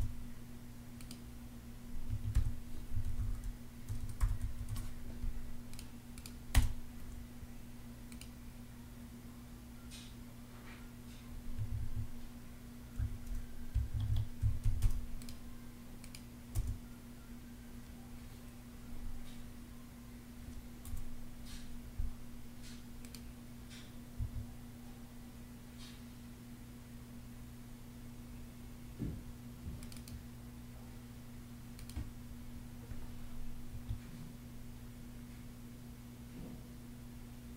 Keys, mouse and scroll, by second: 1.8 Escape, 2.4-4.6 typing, 6.2 space, 11.3 Escape, 12.7-16.2 typing, 13.6 Escape, 20.6 0, 23.9 Escape, 33.4 Escape.